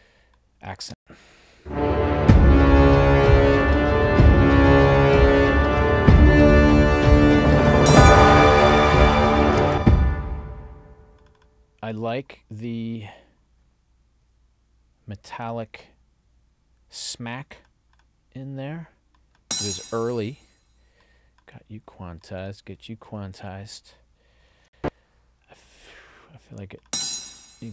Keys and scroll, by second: 0.9 space, 9.6 space, 24.6 ctrl+alt+l.